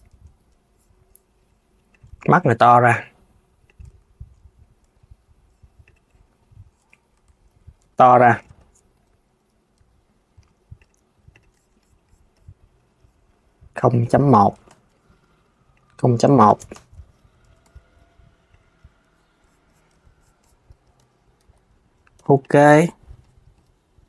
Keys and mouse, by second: 1.6 click, 1.7 Tab, 3.6 Tab, 4.5 `, 6.8 Tab, 7.2 a, 8.2 Tab, 8.6 KP_3, 10.0 r, 11.0 click, 13.4 click, 14.1 ., 15.4-17.0 drag, 17.1 s, 18.2 click, 19.6 Tab, 20.7 Tab, 21.1 KP_3, 21.9 g, 22.2 Tab, 23.8 click.